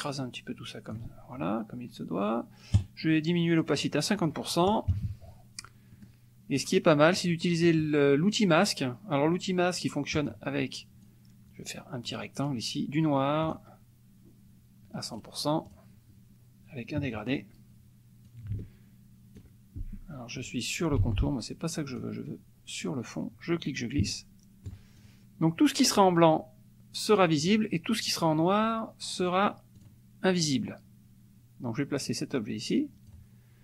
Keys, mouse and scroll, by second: 2.7 right click, 3.7 click, 4.2 click, 4.9 KP_Subtract, 5.9 middle click, 6.6 middle click, 10.2 click, 11.0-12.3 drag, 13.4 click, 15.2 right click, 15.7 click, 17.3 click, 18.2-19.6 ctrl+drag, 21.0 ctrl+z, 21.9 click, 23.7-24.8 ctrl+drag, 24.9 ctrl+click, 27.3 click, 29.2 click, 29.8 click, 30.4-33.4 drag.